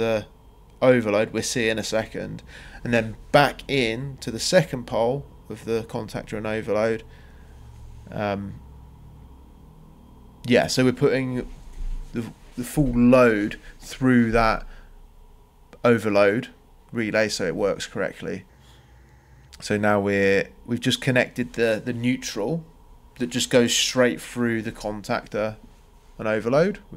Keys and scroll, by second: 1.8 m, 2.3 Return, 17.4 Escape, 21.3 space, 22.5 space.